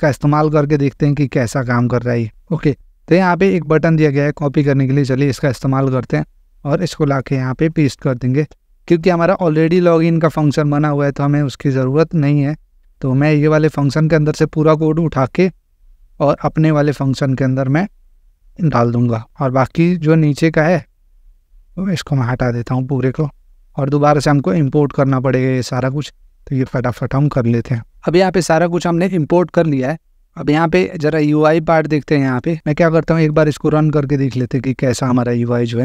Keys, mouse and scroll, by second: 1.8 click, 3.6 click, 6.3 click, 8.5 Return, 8.7 Return, 8.9 Return, 9.5 ctrl+v, 11.5 click, 20.1 click, 22.0 click, 23.4 BackSpace, 23.8 BackSpace, 25.7 click, 26.7 alt+Return, 27.9 Return.